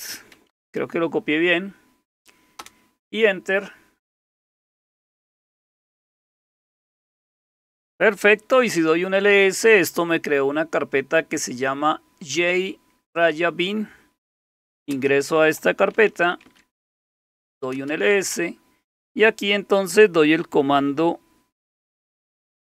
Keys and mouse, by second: 0.1-1.1 typing, 2.4-3.1 typing, 8.3-9.2 typing, 14.3-18.1 typing.